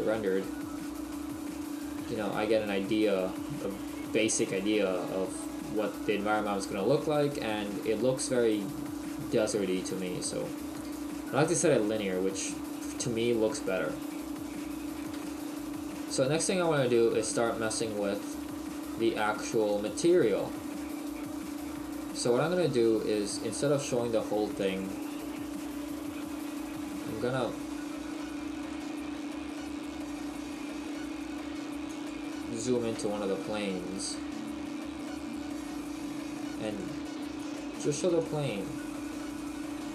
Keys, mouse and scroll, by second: 1.1 middle click, 3.3 middle click, 7.4 middle click, 14.5-14.9 scroll up 1, 15.6 shift+middle click, 19.6 click, 27.8 middle click, 27.8 scroll down 1, 28.9 shift+middle click, 31.9 click, 32.7 KP_Decimal, 36.5 click.